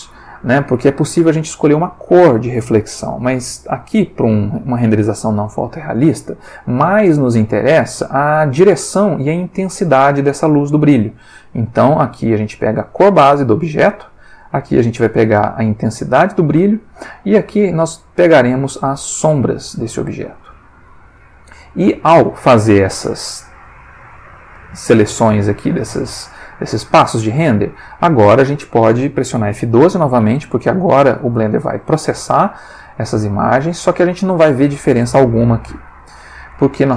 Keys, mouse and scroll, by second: 31.2 F12, 35.8 click.